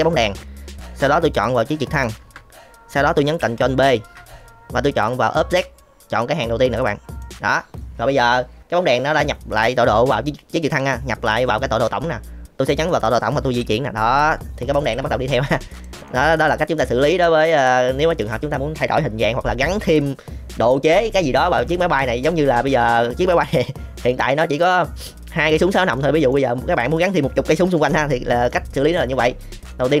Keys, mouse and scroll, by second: 1.9 shift+click, 3.8 ctrl+p, 13.5 g, 15.4-15.8 middle drag, 16.0-16.3 middle drag, 16.8-17.1 middle drag, 17.3-18.0 middle drag, 22.1 middle click, 23.3 middle click, 24.1 middle click, 25.9 middle click, 27.7 middle click, 29.7 shift+middle drag.